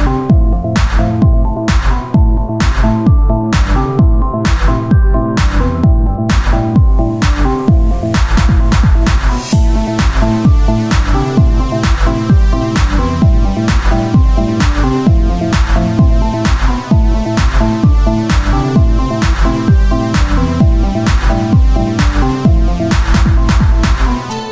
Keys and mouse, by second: 0.6 z, 6.8 z, 8.7 click, 9.8-11.0 drag, 11.9 z, 14.5-15.6 drag, 14.5 z, 14.7 shift+a, 15.9 s, 16.4 z, 18.0 s.